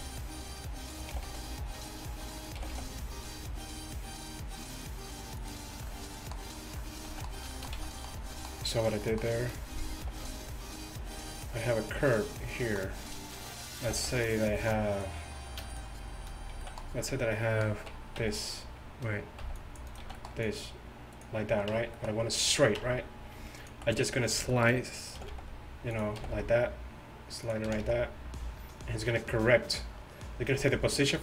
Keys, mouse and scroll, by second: 1.0 g, 1.2 g, 2.6 g, 5.8 click, 7.1 z, 7.8 z, 10.1 g, 13.9 g, 14.7 middle click, 15.0-17.3 right drag, 16.6 z, 18.2 x, 19.5 c, 20.1 z, 22.0 Tab, 22.8 Tab, 25.2 g, 26.3 g, 27.7 g.